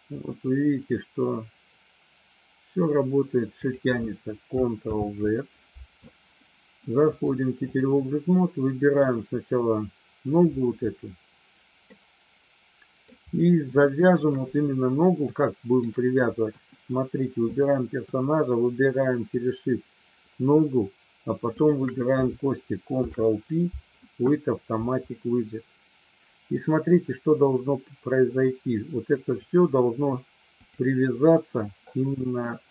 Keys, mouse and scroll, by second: 3.5 click, 4.8 ctrl+z, 7.0 click, 9.0 click, 11.8-13.0 middle drag, 13.8 shift+middle click, 15.4 shift+middle click, 16.5 KP_1, 17.4 click, 19.4 shift+click, 22.9 ctrl+p, 29.2 click.